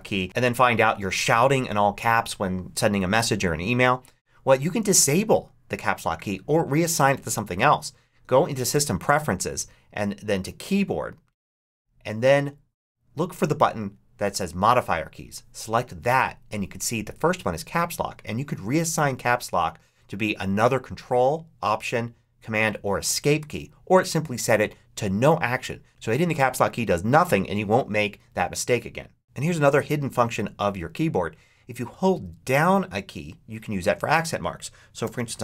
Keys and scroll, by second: 34.7-35.4 typing.